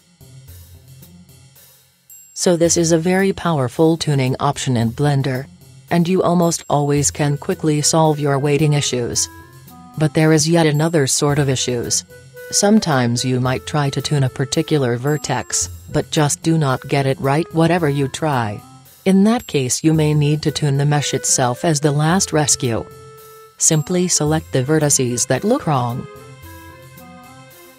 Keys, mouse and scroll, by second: 0.0 click, 0.0 middle click, 0.2 click, 0.3-1.7 middle drag, 1.9-3.7 drag, 4.2-6.0 drag, 6.9-8.8 right drag, 8.4-10.1 drag, 10.9-12.5 drag, 13.6-15.2 right drag, 15.5-17.3 drag, 17.4-19.2 drag, 19.5-20.7 right drag, 20.7-21.3 middle drag, 21.3 click, 22.4 click, 22.5 click, 22.5 middle click, 22.9 click, 23.4-26.3 middle drag, 27.4 g.